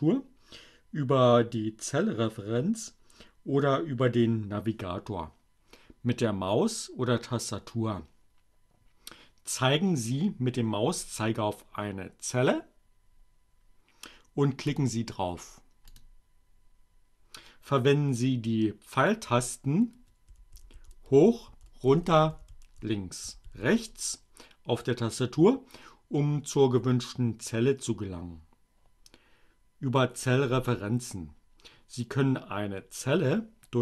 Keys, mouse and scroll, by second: 13.5 click, 15.1 click, 18.6 Down, 21.2 Left, 21.8 Up, 22.8 Right.